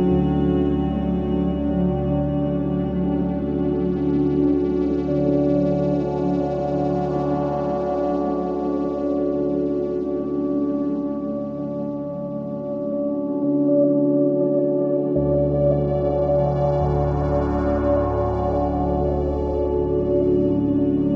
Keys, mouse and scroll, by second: 0.4 alt+middle click, 0.8-2.5 scroll up 1, 2.5 click, 3.4 ctrl+z, 5.3 click, 6.6 ctrl+z, 7.4 click, 11.4 alt+middle click, 13.5 click, 14.6 scroll up 1, 14.9 alt+middle click, 15.3 ctrl+z, 16.4 click, 17.1 ctrl+z, 18.6 click, 19.4 ctrl+z, 19.8 click, 20.4 ctrl+z, 21.0 click.